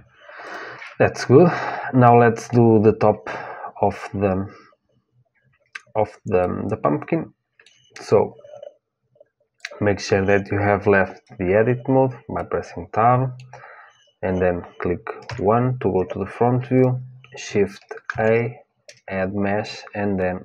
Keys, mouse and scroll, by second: 0.2-2.2 drag, 2.2 middle click, 6.2-8.2 middle drag, 9.3-11.7 drag, 12.1-15.0 middle drag, 15.0 KP_1, 16.5-18.9 drag, 17.8 shift+a.